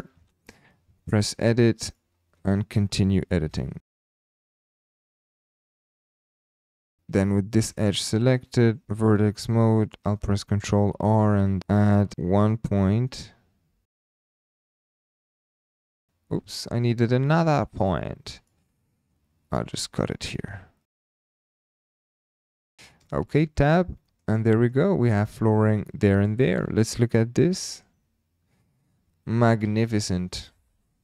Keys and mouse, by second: 1.1 Tab, 1.9 click, 2.4 shift+middle click, 3.4-6.0 typing, 4.2 click, 4.4 click, 4.8 click, 5.1 click, 5.6 shift+middle click, 5.8 click, 6.7 click, 7.1 2, 7.7 click, 8.8 1, 10.6 ctrl+r, 14.0 shift+click, 14.5-15.7 typing, 15.2 click, 15.5 click, 16.0 click, 16.6 shift+click, 17.7 shift+click, 18.4 click, 19.5 ctrl+r, 20.9-22.3 typing, 21.1 click, 21.5 shift+middle click, 22.2 click, 22.6 click, 23.1 shift+middle click, 23.4 Tab, 24.0 shift+middle drag, 24.3-24.7 middle drag, 25.2 shift+click, 26.7 click, 27.4-27.8 shift+middle drag, 30.0 KP_7.